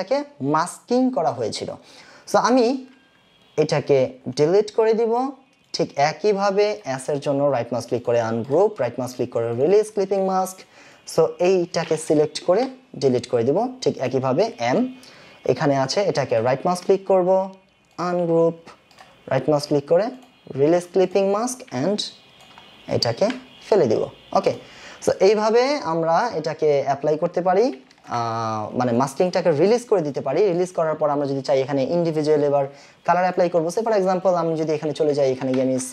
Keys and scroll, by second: 4.6 Delete, 12.6 Delete, 28.0 ctrl+KP_Subtract, 35.2-35.9 typing.